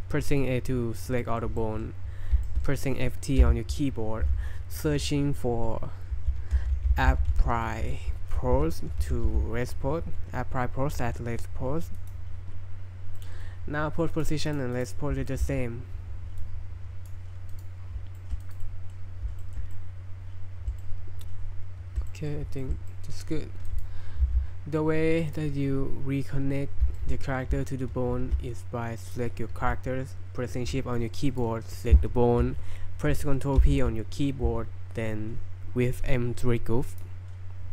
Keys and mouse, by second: 1.2 right drag, 1.6 shift+middle drag, 2.4 shift+middle click, 3.4 F3, 7.1 p, 7.9 y, 8.6 BackSpace, 13.2 click, 14.1 click, 14.5 click, 14.7 click, 15.3 shift+middle click, 16.4 click, 17.5 click, 18.2 shift+middle click, 18.4 click, 18.6-19.0 middle drag, 19.4 shift+middle click, 19.7-20.7 middle drag, 20.8-22.0 shift+middle drag, 22.1 middle drag, 22.6 shift+middle click, 22.9 middle click, 23.0 click, 24.2 g, 25.3-26.8 right drag, 27.0 shift+middle drag, 29.0 right click, 31.3 shift+right click, 33.6 ctrl+p.